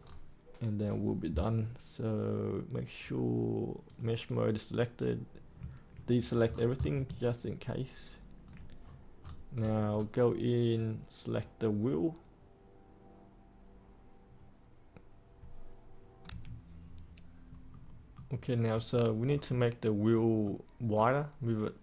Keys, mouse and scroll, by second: 0.0-2.6 scroll down 1, 3.8 click, 6.2 click, 6.4-6.9 scroll down 1, 7.3 ctrl+right click, 8.8-10.7 scroll up 1, 10.7 right click, 16.2 3, 17.6 middle click, 18.4 scroll up 1, 19.3-20.1 scroll down 1, 20.1 middle click.